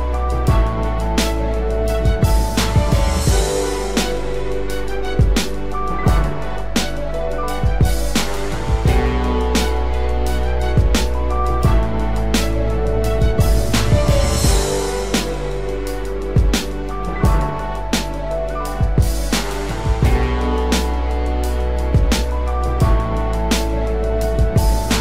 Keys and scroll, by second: 0.5 ctrl+z, 7.5 ctrl+z, 19.2 ctrl+d.